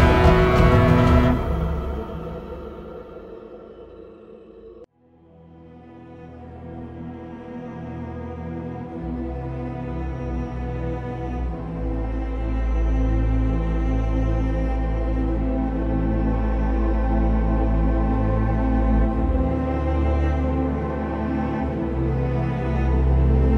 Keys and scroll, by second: 0.2 ctrl+a, 0.4 ctrl+c, 0.8 ctrl+v, 3.0 ctrl+v, 3.4 ctrl+shift+i, 3.9 ctrl+d, 8.0 ctrl+e.